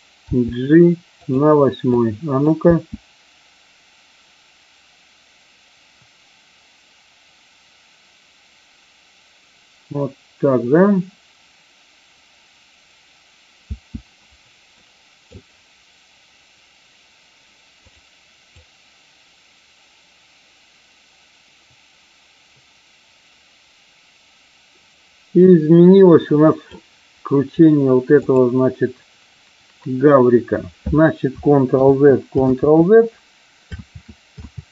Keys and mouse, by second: 0.3 g, 1.1 click, 1.8 click, 2.7 space, 13.6 space, 14.7-15.3 middle drag, 17.7 click, 18.6-26.7 drag, 28.2 click, 31.7 ctrl+z, 32.5 ctrl+z, 33.7 ctrl+z, 34.5 ctrl+z.